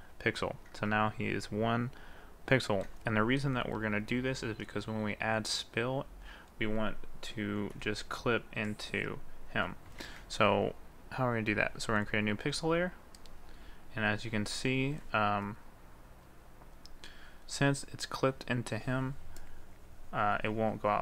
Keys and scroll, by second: 10.2 ctrl+z.